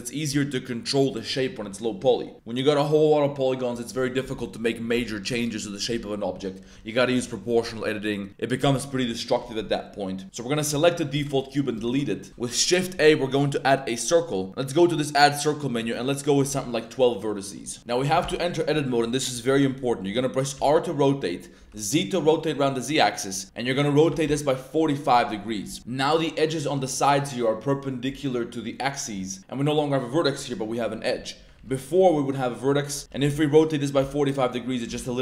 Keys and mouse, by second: 10.2 click, 11.1 x, 11.8 shift+a, 12.3 shift+a, 14.8 click, 15.8 click, 17.2 drag, 18.2 Tab, 20.5 r, 21.6 z, 24.1 4, 24.2 5, 31.5 ctrl+z, 33.1 r, 33.2 z, 33.9 4, 34.8 Return, 34.9 click.